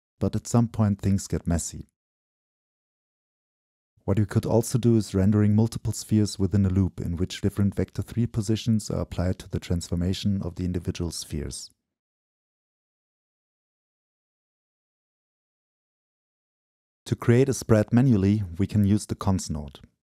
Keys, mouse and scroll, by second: 0.2 ctrl+v, 0.8-2.5 drag, 2.5 ctrl++, 3.5-5.8 drag, 6.3-8.1 drag, 11.2-12.1 drag, 12.1 Delete, 12.4-13.6 drag, 13.6 BackSpace, 14.1-20.1 drag.